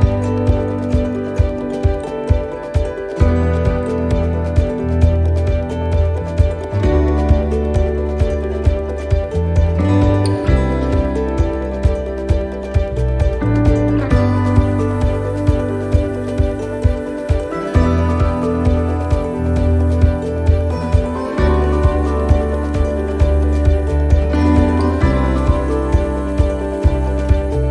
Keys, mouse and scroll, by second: 0.9 click, 2.6 right click, 3.7 click, 5.0 middle click, 6.6 right click, 7.5 click, 8.7 middle click, 9.0 scroll down 2, 9.6 middle click, 11.8 right click, 13.3 click, 14.3 right click, 16.3 right click, 16.3 middle click, 16.9-17.2 scroll down 1, 18.1 click, 19.7 middle click, 21.0 click, 22.6 middle click, 24.0 middle click, 24.6 shift+middle click, 25.3 shift+middle click, 25.8 shift+middle click, 26.3 scroll up 3, 26.7 middle click, 27.3 scroll down 1, 27.6 middle click.